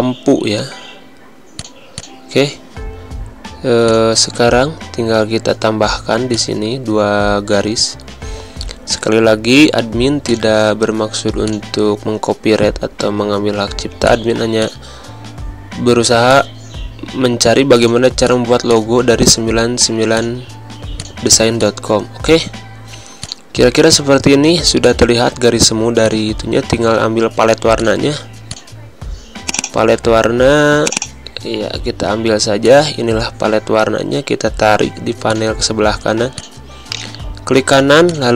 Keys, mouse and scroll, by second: 1.5 click, 3.9 click, 10.2 click, 13.6 z, 14.0 click, 14.4 space, 14.6 click, 15.0 v, 16.3 alt+click, 17.8 click, 20.7 z, 21.0 click, 21.4 space, 21.5 click, 21.8 space, 23.2 click, 23.7 space, 23.8 click, 23.9 r, 28.7 scroll down 2, 29.4-35.1 drag, 35.1 space, 35.2 click, 35.5 space, 36.2 click, 36.8 right click, 37.6 click.